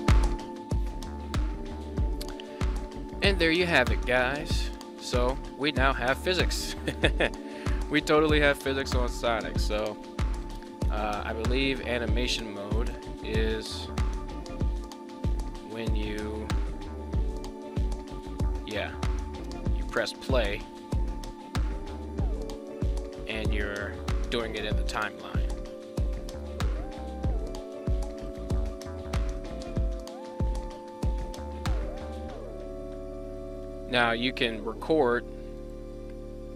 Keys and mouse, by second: 0.1 right click, 3.1 click, 4.1 shift+middle drag, 4.5-5.1 middle drag, 5.4 shift+middle click, 6.8 shift+middle drag, 10.2-11.5 drag, 12.6 click, 16.4 r, 16.6 r, 19.3 space, 20.7 r, 26.1 right click, 27.0 r, 29.1 space, 30.6-32.1 drag, 35.4 click.